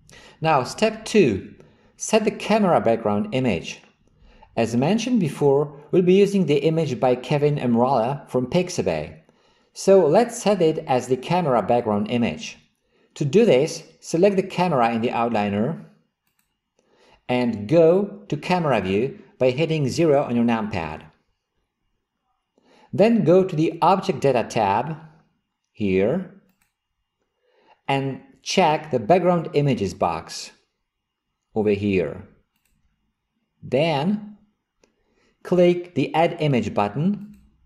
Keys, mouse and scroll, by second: 16.3 click, 21.0 KP_0, 26.5 click, 32.6 click, 33.9 click, 37.2 click.